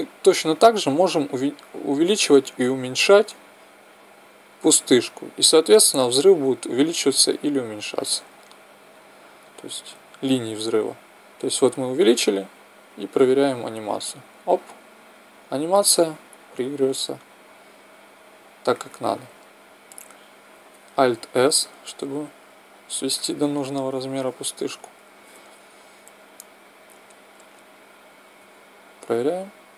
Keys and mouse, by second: 1.3 s, 12.8 click, 14.1 click, 21.7 alt+s, 23.2-24.9 drag, 28.3 alt+a.